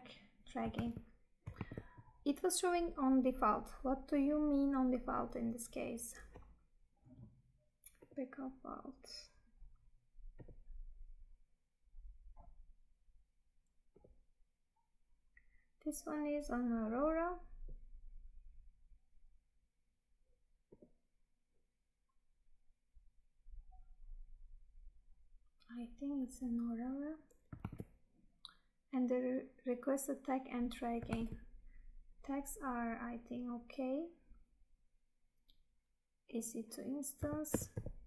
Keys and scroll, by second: 0.9 Tab, 27.7 Tab, 31.2 Tab.